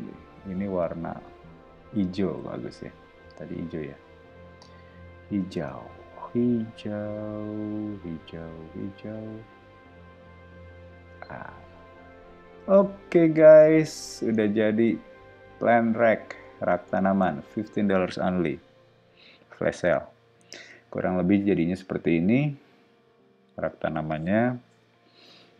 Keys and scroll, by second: 2.2 b, 5.5 space, 11.1 space, 12.1 ↻, 12.6 o.